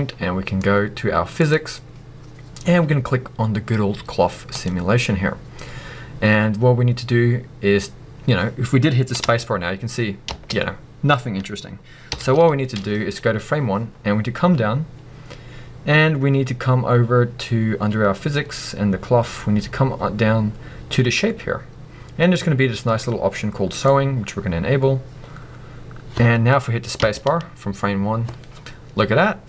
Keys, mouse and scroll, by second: 1.4 click, 4.5-23.8 drag, 9.0 scroll down 2, 9.2 space, 12.1 shift+Left, 14.1-14.9 scroll down 2, 14.9-20.3 scroll down 1, 20.3-23.7 scroll up 2, 27.0 space.